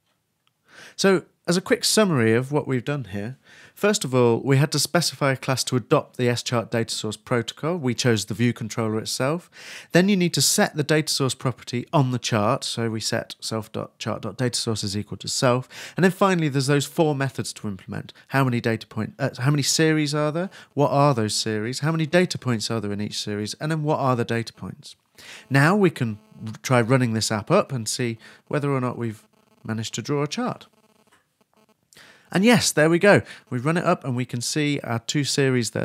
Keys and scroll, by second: 31.8 super+Left.